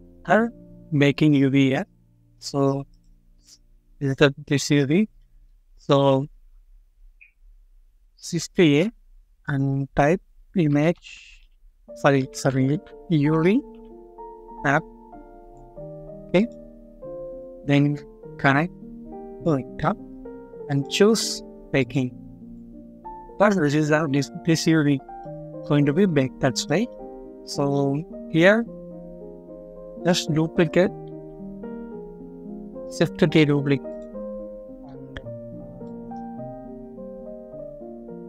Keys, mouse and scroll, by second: 5.1 middle click, 8.5 typing, 10.5-13.6 typing, 16.6 scroll up 1, 17.4 typing, 19.7 middle click, 24.8 scroll down 1, 25.1 middle click, 27.0-27.4 scroll down 1, 27.4 middle click, 28.6 scroll up 1, 29.0-29.4 scroll down 1, 29.4 middle click, 31.0 ctrl+d, 33.0 d, 34.1-34.5 scroll up 1, 34.5 middle click, 34.9 scroll up 1, 35.7 middle click.